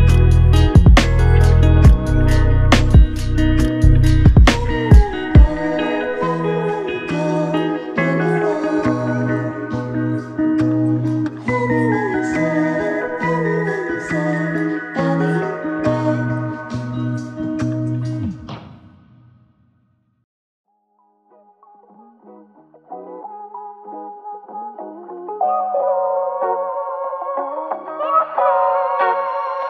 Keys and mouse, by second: 4.9 ctrl+click, 7.5 ctrl+click, 9.3 w, 10.3 w, 10.7 alt+click, 15.3 ctrl+click, 20.4 double click, 29.0 double click.